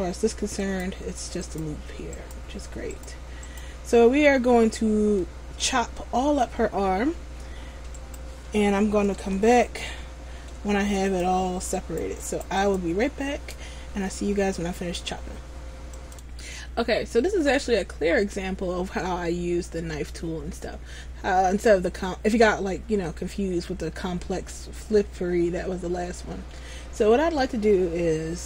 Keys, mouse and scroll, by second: 0.8 right click, 4.5 scroll down 1, 5.3 middle click, 5.3-5.7 scroll down 2, 8.2 right click, 9.3 Tab, 9.9 scroll up 1, 11.2 alt+right click, 11.2 scroll up 2, 12.4 alt+right click, 12.8 alt+right click.